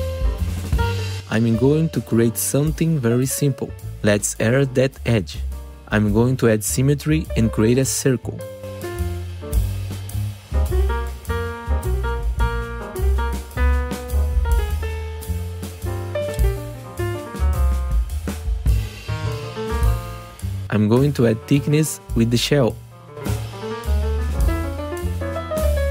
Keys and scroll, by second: 2.5 f, 2.9 F3, 3.7 1, 3.8 F3, 4.8 Delete, 5.7 F3, 15.9 ctrl+t, 19.0 3.